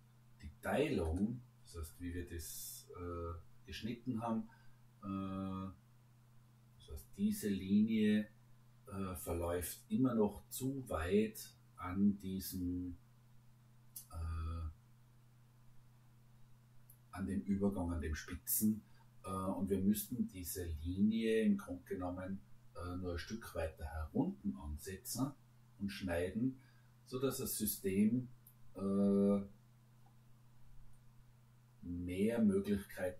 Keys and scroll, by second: 3.2 Escape.